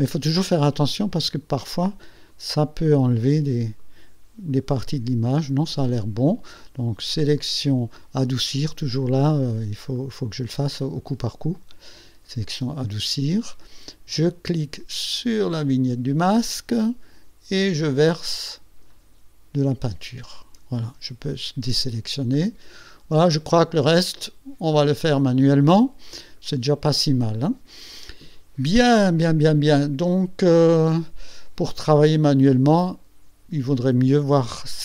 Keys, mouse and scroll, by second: 1.8 click, 3.3 click, 4.6-5.8 drag, 5.8 middle click, 7.4 click, 10.0 click, 11.6 click, 15.5 click, 17.9-19.1 drag, 21.2 ctrl+shift+a, 22.2-22.5 ctrl+scroll up 2, 22.6-23.0 ctrl+scroll down 2, 23.4-25.5 ctrl+drag, 25.5 scroll up 1, 26.4 click, 30.7 click, 32.3 click.